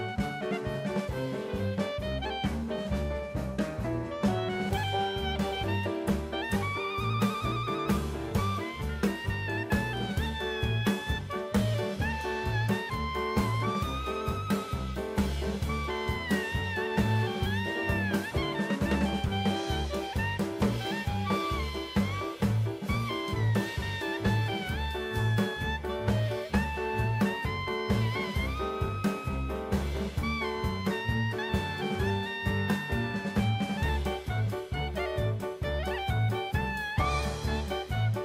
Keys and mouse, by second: 4.8 shift+a, 7.3 click, 9.0-11.3 drag, 12.2 shift+middle drag, 13.1-13.6 drag, 14.0-17.5 drag, 18.8-20.3 middle drag, 21.0 Tab, 22.4 KP_1, 23.1 middle click, 23.8 3, 24.3 click, 25.1 click, 26.1 KP_1, 27.0 shift+middle click, 27.7-28.9 drag, 29.4 Tab, 30.1-31.3 drag, 31.7 Tab, 32.0 middle click, 33.5 click, 34.4 KP_1, 35.5 middle click.